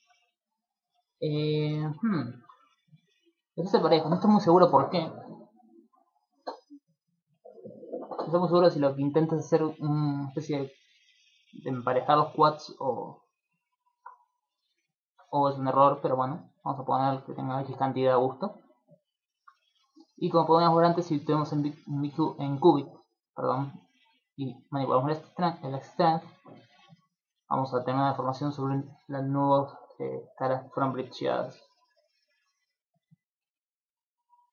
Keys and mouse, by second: 0.3 z, 0.8 middle click, 3.3 middle click, 14.7 middle click, 16.4 click, 16.8 click, 17.0 click, 17.2 click, 17.4 click, 17.6 click, 17.6 click, 17.8 click, 18.0 click, 18.2 click, 18.4 click, 18.6 click, 18.8 click, 19.0 click, 19.2 click, 19.7 middle click, 22.6 click, 24.2 click, 26.8 middle click, 27.6 middle click, 27.9 middle click, 29.0 middle click, 30.3 middle click, 30.8 middle click, 31.2 ctrl+middle click, 31.5 middle click, 32.2 shift+middle click, 32.6 middle click.